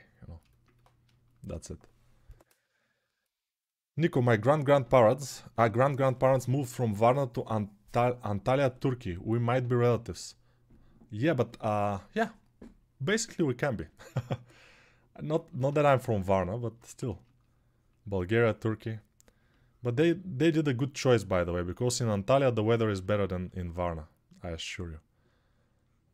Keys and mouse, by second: 16.6 1.